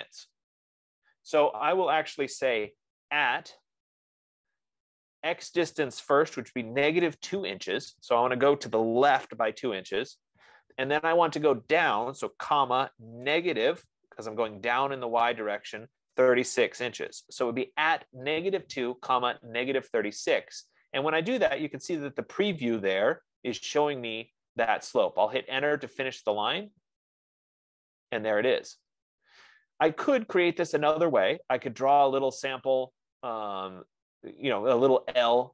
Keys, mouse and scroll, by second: 3.3 shift+2, 6.6-7.8 typing, 12.8-13.5 typing, 16.1-16.9 typing, 24.1 Return.